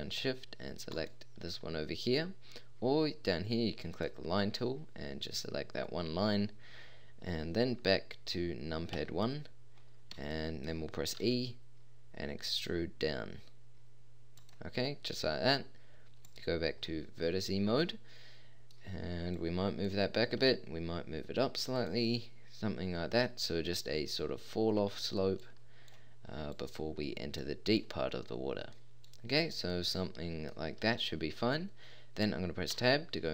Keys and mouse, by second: 5.8-8.9 middle drag, 8.9 KP_1, 11.2 e, 16.3-17.8 drag, 17.8-18.8 middle drag, 19.3-19.9 drag, 20.3 g, 21.2 click, 25.4 click, 26.5 click, 27.4 click, 28.3-29.1 middle drag, 29.9-30.4 middle drag, 32.7 Tab.